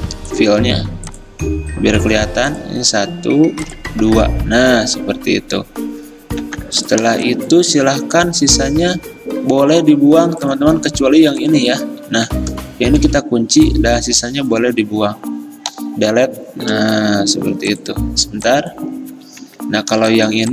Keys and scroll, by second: 6.5 v, 12.2 ctrl+z, 13.1 ctrl+2, 15.8 Delete, 17.4 ctrl+z, 19.4 ctrl+z.